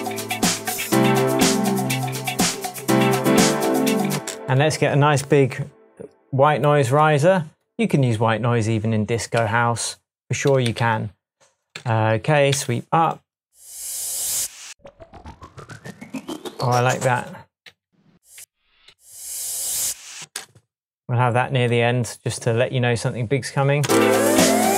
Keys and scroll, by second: 5.2 super+t, 9.3 Left, 10.6 Down, 10.8 Right, 11.7 Left, 12.5 Right, 17.6 Down, 18.8 Up, 20.2 space, 23.8 space.